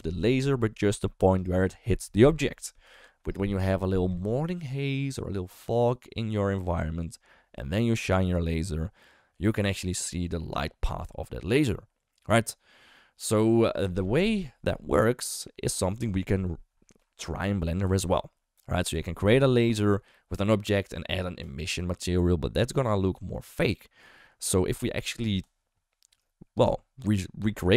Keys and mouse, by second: 15.0 right click.